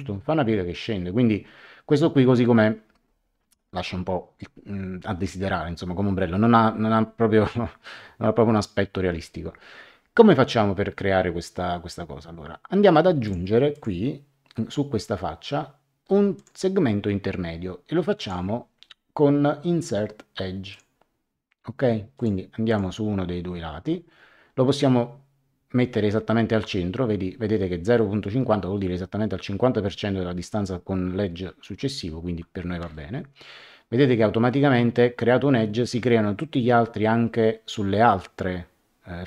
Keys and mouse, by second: 13.2 click, 16.3 click, 18.1 click, 20.7 click, 22.1 click, 32.8 Return.